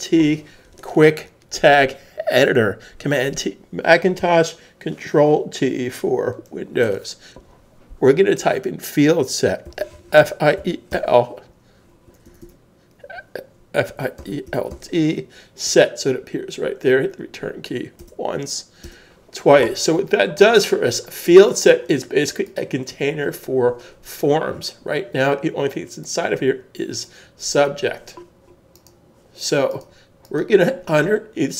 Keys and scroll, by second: 9.6-11.1 typing, 12.5 typing, 13.9-14.7 typing, 16.5 typing, 18.0 Return.